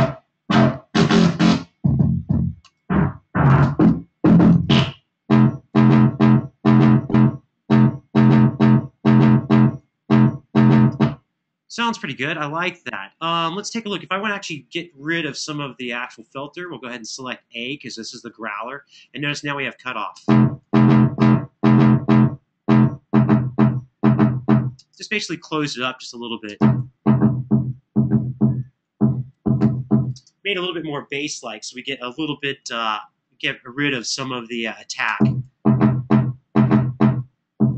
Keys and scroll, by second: 10.5 space, 19.9 space, 24.5 space, 26.3 space, 29.9 space, 34.8 space.